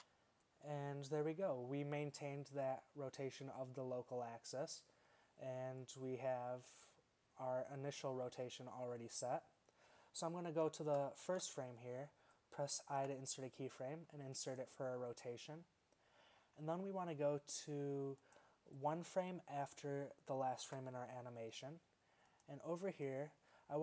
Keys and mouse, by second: 0.0 Tab, 11.3 shift+Left, 13.0 i, 20.8 Right.